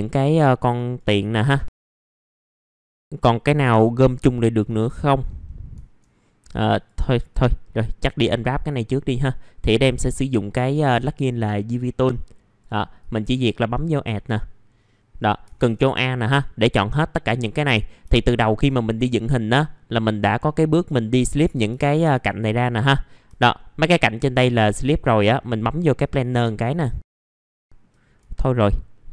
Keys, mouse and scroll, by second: 0.7 right click, 1.3 click, 1.7 scroll down 1, 1.7 F4, 1.9 middle click, 2.0 F4, 2.1 scroll up 1, 2.3 click, 2.5 scroll down 1, 2.8-3.7 scroll up 1, 4.5 click, 5.2-5.7 scroll down 1, 6.2 middle click, 6.7 click, 7.6 middle click, 9.6 click, 12.9-14.0 drag, 17.6 middle click, 18.1 alt+middle click, 21.7 alt+middle click, 23.5 middle click, 25.9 click, 27.0 click, 27.2 alt+middle click, 28.9 middle click.